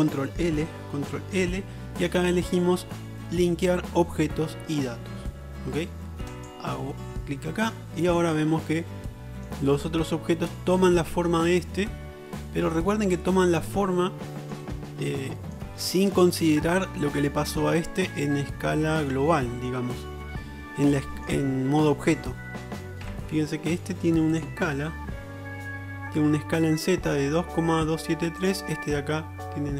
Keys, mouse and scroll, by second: 1.4 ctrl+l, 9.3-9.6 middle drag, 14.4 middle click, 15.7 click, 17.0-17.8 middle drag, 18.4-20.6 middle drag, 23.2 n, 28.5-29.7 drag.